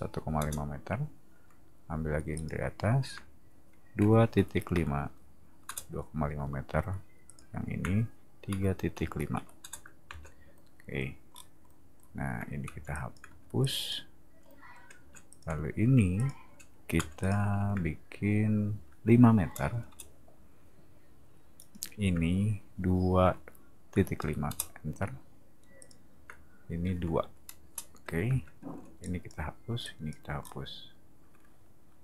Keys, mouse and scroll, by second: 0.3 Return, 2.3 click, 4.0 2, 4.3 ., 5.6 Return, 7.3 click, 8.3-10.1 typing, 11.3 middle click, 12.6 w, 12.9 click, 13.3 e, 13.6 click, 14.9 space, 15.3 click, 16.2 click, 17.0 m, 17.2 click, 19.4 5, 19.9 Return, 21.6 click, 23.2 2, 23.9 ., 24.5 Return, 25.8 click, 27.2 2, 27.6 Return, 28.3 space, 28.8 e, 29.0 click, 29.8 click, 30.4 scroll up 1.